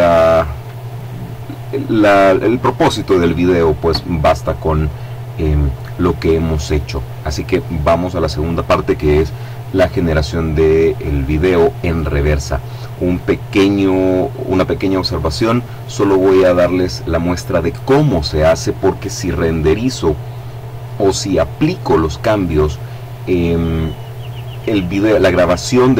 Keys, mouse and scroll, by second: 5.7 click.